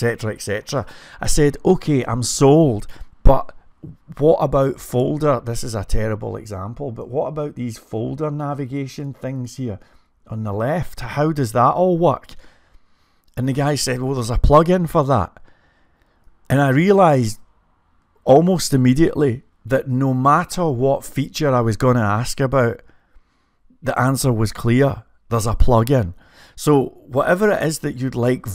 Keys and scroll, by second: 1.0-1.7 typing, 16.4-17.5 typing.